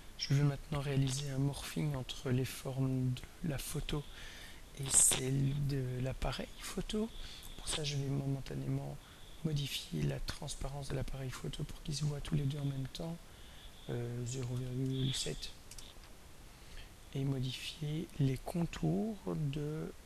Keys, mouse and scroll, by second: 3.1 click, 10.4 click, 11.7 click, 12.5 click, 13.0 click, 14.0-15.2 typing, 15.6 Return, 19.6 click.